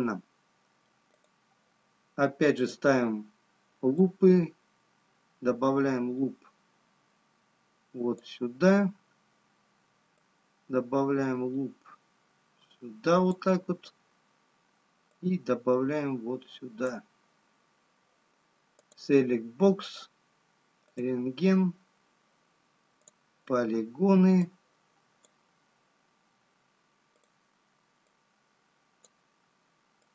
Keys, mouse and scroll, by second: 1.6 click, 3.6 click, 10.8 click, 15.8 click, 20.1 click, 21.2 click, 28.0 click, 29.3 click.